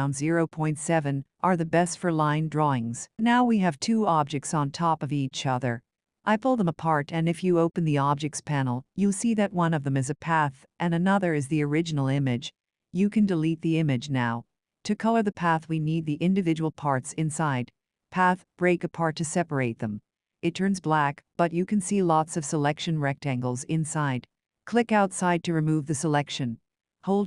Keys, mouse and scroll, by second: 2.4 click, 3.8 click, 8.9 click, 11.3 click, 16.7 click, 26.3 click.